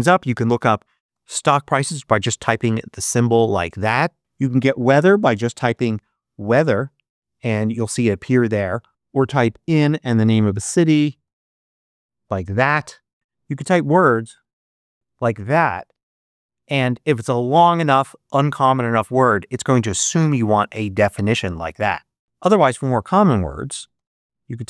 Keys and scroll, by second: 0.0-1.5 typing, 4.5-6.1 typing, 8.9-11.6 typing, 13.1-15.2 typing, 22.2 super+BackSpace, 22.6-24.6 typing.